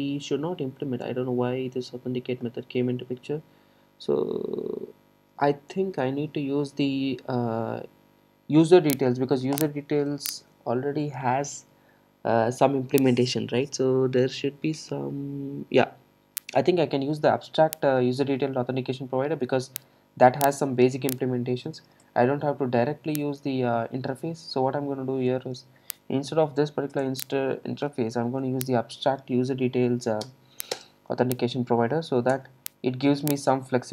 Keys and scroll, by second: 11.0 super+b, 21.0 super+c, 27.0 Return, 32.4 alt+Return.